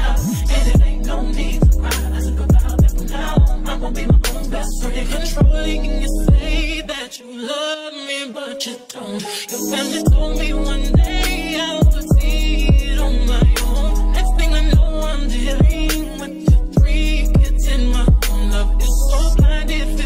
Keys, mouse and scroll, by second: 0.5-2.0 drag, 2.0 middle click, 2.2-3.8 drag, 3.8 middle click, 4.1-6.3 drag, 6.3 middle click, 6.6 click, 7.1 middle click, 7.4 click, 8.1 middle click, 8.5 click, 9.4 middle click, 9.8 click, 10.7 middle click, 10.7 g, 11.5 click, 12.2 middle click, 12.5-13.8 drag, 13.9 g, 14.7-20.0 drag.